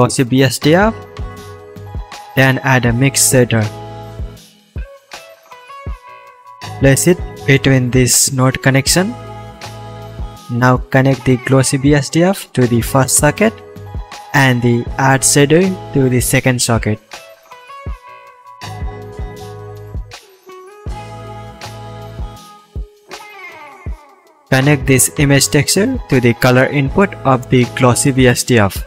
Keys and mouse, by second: 1.4 s, 4.1-8.7 drag, 4.1-8.7 middle drag, 4.1-8.7 right drag, 4.7 shift+a, 10.3-19.9 drag, 10.3-19.9 middle drag, 10.3-19.9 right drag.